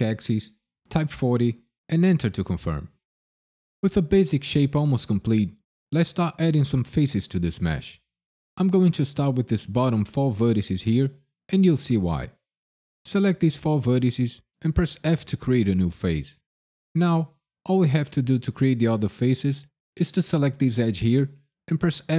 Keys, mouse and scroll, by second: 0.6 KP_4, 0.9 KP_0, 1.9 KP_Enter, 12.1 click, 15.0 f, 19.6 click, 21.2-22.1 typing.